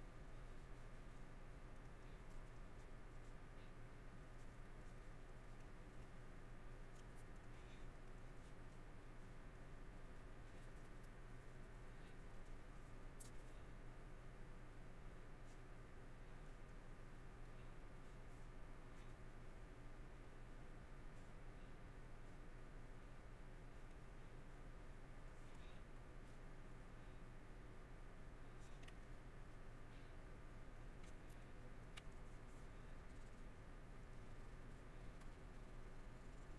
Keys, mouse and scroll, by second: 1.1 middle click, 2.5 middle click, 3.3 middle click, 4.1 middle click, 5.0 middle click, 6.7 middle click, 7.3 middle click, 8.7 middle click, 9.7 middle click, 10.2 middle click, 12.6 middle click, 13.5 middle click, 15.5 middle click, 16.3 middle click, 17.2 middle click, 18.1 middle click, 19.1 middle click, 21.2 middle click, 23.8 middle click, 24.7 middle click, 26.3 middle click, 26.7 middle click, 28.7 middle click, 29.5 middle click, 30.9 middle click, 31.3 scroll, 31.5 middle click, 32.7 middle click, 33.5 middle click, 34.7 middle click.